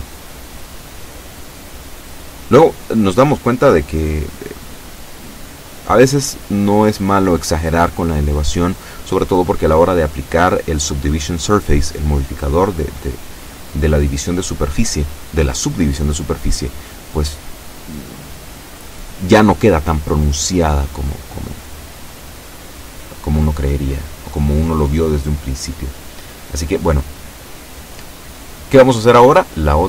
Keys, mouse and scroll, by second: 1.3-5.3 middle drag, 5.6 KP_7, 7.3-8.3 shift+middle drag, 10.7 right click, 11.4 middle click, 12.4 middle click, 12.9 shift+right click, 13.3-15.2 shift+middle drag, 15.4 shift+middle click, 16.3 shift+middle click, 17.6 KP_7, 20.8-23.4 middle drag, 23.6-29.5 middle drag.